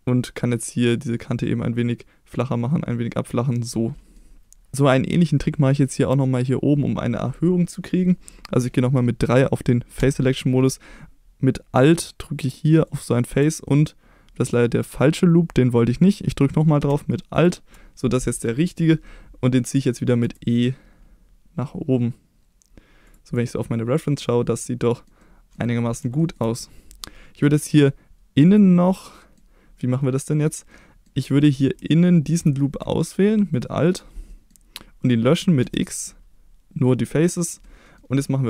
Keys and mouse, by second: 3.2 click, 3.7 middle click, 10.0 3, 12.9 alt+click, 13.7-15.9 middle drag, 17.4 alt+click, 20.2 e, 23.1 click, 23.4 middle click, 24.7 middle click, 25.2 middle click, 26.2 shift+middle click, 28.5 click, 28.9 middle click, 30.7 middle click, 31.4 middle click, 33.5 alt+click, 34.3 middle click, 35.6 x, 37.7 middle click.